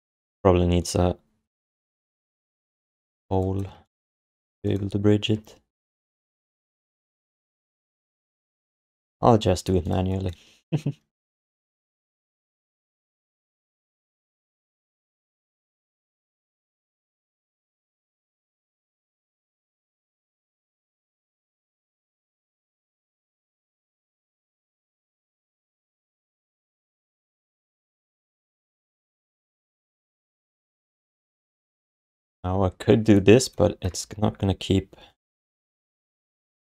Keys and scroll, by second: 1.7 BackSpace, 2.8 g, 3.6 q, 24.4 q, 26.4 g, 29.0 g, 29.6 g, 30.5 alt+shift+d, 31.1 3, 32.9 1, 33.9 space, 35.2 space, 36.6 space.